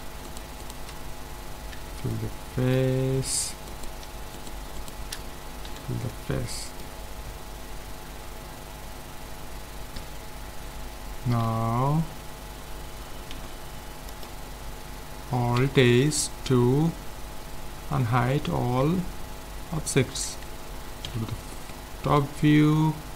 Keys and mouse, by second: 1.8 f, 3.7-6.4 right drag, 5.7 f, 6.1 middle click, 6.4 middle click, 8.0 Tab, 13.3 ctrl+s, 15.6 alt+h, 18.9 z, 20.3 a, 21.0 KP_7.